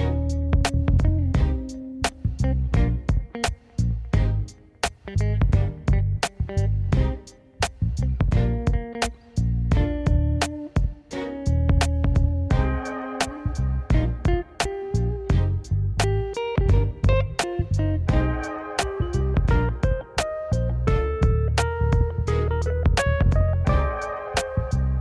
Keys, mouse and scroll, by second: 3.1 click, 3.9 click, 5.9 s, 7.3 click, 8.5 s, 10.4 click, 11.0 s, 12.5 click, 13.4 s, 15.0 click, 15.8 s, 16.5 click, 17.3 s, 18.7 click, 19.6 s, 21.7 click, 22.6 g.